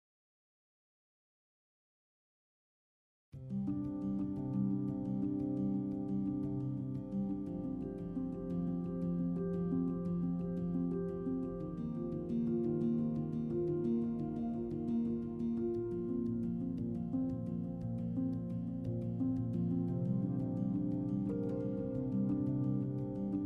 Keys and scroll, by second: 4.8 e, 5.8-6.6 typing, 18.6 t, 23.1 z.